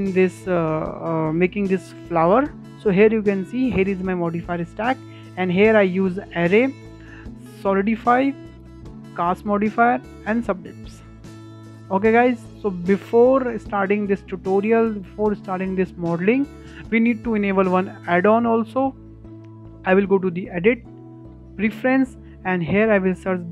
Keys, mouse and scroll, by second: 6.5 click, 7.2 click, 7.9 click, 8.8 click, 9.1 click, 9.9 click, 10.3 click, 11.1-11.4 drag, 11.4 middle click, 11.7-12.0 scroll down 4, 12.0-12.6 shift+middle drag, 12.6-13.3 scroll up 4, 13.3-19.0 shift+middle drag, 19.0-22.1 drag.